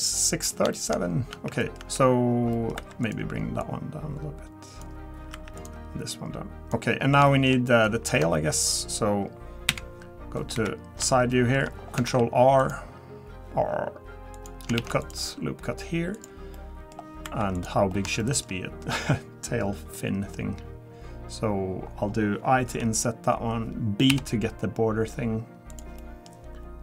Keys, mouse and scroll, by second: 0.1 middle click, 0.7 shift+middle click, 1.0 scroll up 2, 1.3 Tab, 1.6 scroll up 1, 1.6 middle click, 1.8 Tab, 2.6 middle click, 2.7 scroll up 1, 3.0 click, 3.0 2, 5.3 1, 5.6 click, 6.2 click, 6.9 scroll down 2, 7.3 shift+middle click, 7.7 middle click, 9.7 KP_1, 10.5 KP_3, 11.3 shift+middle click, 11.7 scroll down 2, 12.1 ctrl+r, 14.8 ctrl+r, 16.5 middle click, 17.2 3, 17.5 click, 17.9-18.2 scroll up 3, 18.2 shift+middle click, 19.9 middle click, 21.8 scroll up 3, 22.7 i, 26.0 middle click, 26.2-26.8 scroll down 1.